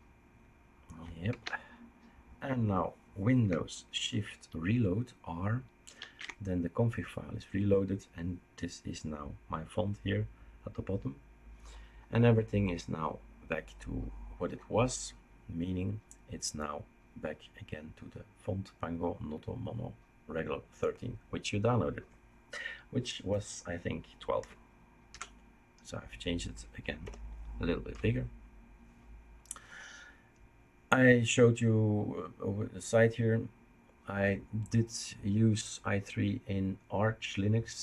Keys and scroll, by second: 1.2 ctrl+s, 25.1 typing, 27.9 typing.